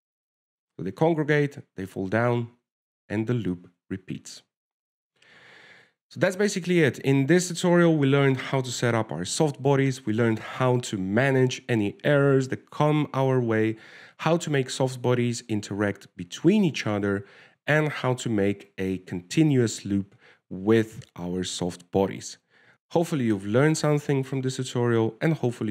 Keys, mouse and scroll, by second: 5.1 alt+a, 6.5 ctrl+s.